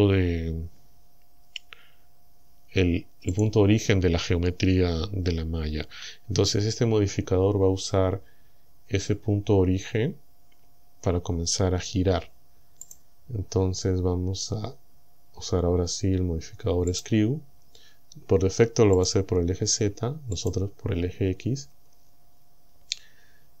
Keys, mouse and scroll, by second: 3.4 click, 12.9 click, 17.0 click, 19.0 click, 20.4 click.